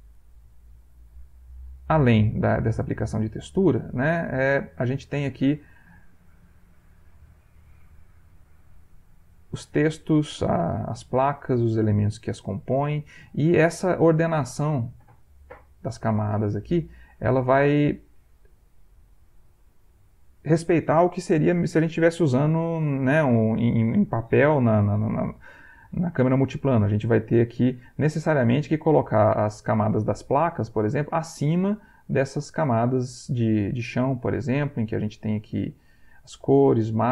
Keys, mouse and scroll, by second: 0.7 click, 1.4 click, 1.8 click, 2.3 middle click, 4.7 click, 5.4 middle click, 6.8 click, 7.3 middle click, 8.4 click, 8.8 click, 9.6 middle click, 10.5 click, 11.1 click, 11.8 middle click, 13.0 click, 13.7 click, 14.7 click, 15.5 click, 16.5-17.5 middle drag, 18.9-20.6 drag, 28.3 click, 29.5 click, 31.7 click, 32.2 click, 32.8 click, 33.3 click, 34.1 click, 35.3 click, 35.8 click.